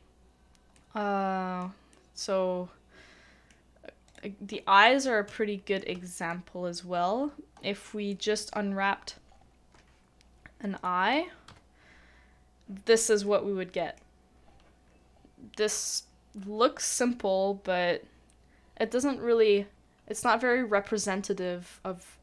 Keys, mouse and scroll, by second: 4.4-4.8 scroll up 1, 4.8 middle click, 5.3 shift+middle click, 6.0 shift+middle click, 6.4-7.3 scroll down 1, 7.3-8.1 scroll up 1, 8.1 middle click, 13.2 middle click.